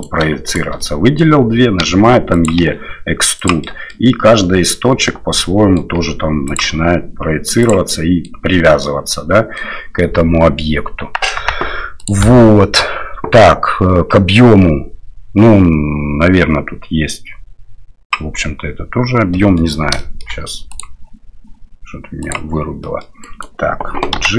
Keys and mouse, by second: 0.5 shift+right click, 0.8 middle click, 1.8 e, 2.6 e, 3.6 middle click, 5.1 middle click, 6.6 e, 7.9 middle click, 8.8 middle click, 11.4 Tab, 12.1-18.2 drag, 19.3 middle drag, 20.0 shift+middle drag, 20.8-22.6 drag, 22.8 middle drag, 23.2 right click, 24.2 g.